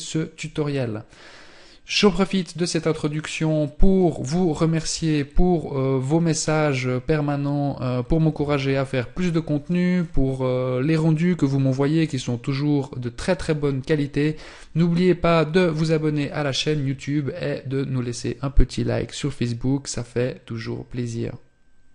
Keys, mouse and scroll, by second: 5.0 KP_0.